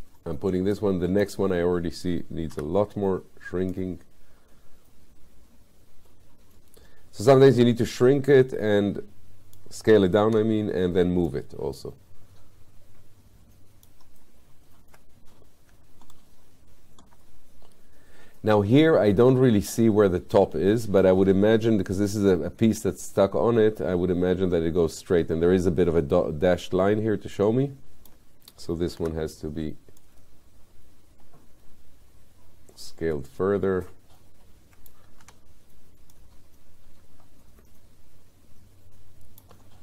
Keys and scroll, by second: 2.6 r, 10.3 w, 29.0 r, 35.2 w.